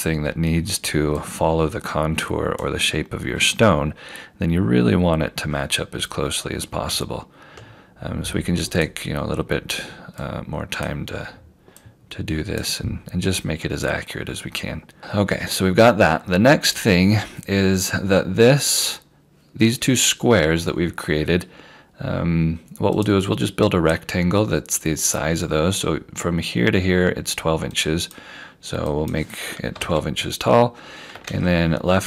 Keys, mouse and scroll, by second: 1.1 q, 3.7 scroll, 3.7 scroll up 1, 5.2-6.8 scroll down 1, 6.9 q, 7.4 click, 9.4 q, 10.2 click, 11.0 q, 11.8 click, 13.9 scroll, 13.9 scroll down 1, 15.1-16.0 scroll up 1, 16.0 scroll down 1, 17.5 scroll up 1, 23.0 click, 27.8 click, 29.8 1, 30.9 2, 31.3 shift+Tab.